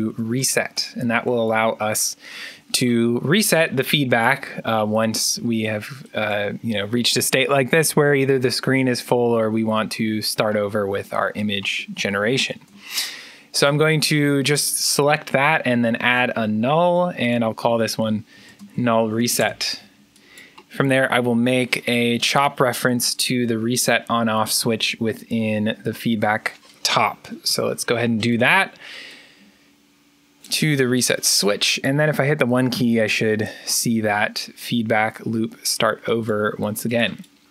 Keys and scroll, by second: 0.0-0.7 typing, 12.4 alt+n, 18.2-19.5 typing, 32.6 1.